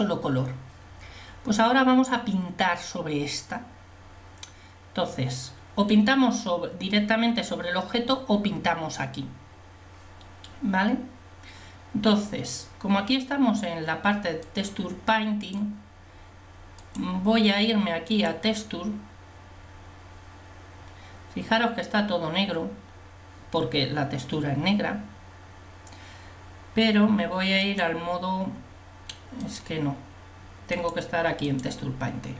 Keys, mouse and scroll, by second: 14.7 click, 15.2 click.